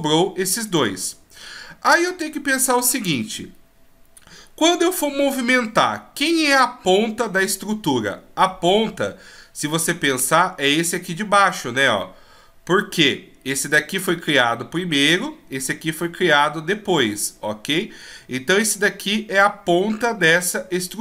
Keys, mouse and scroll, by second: 0.7 shift+right click.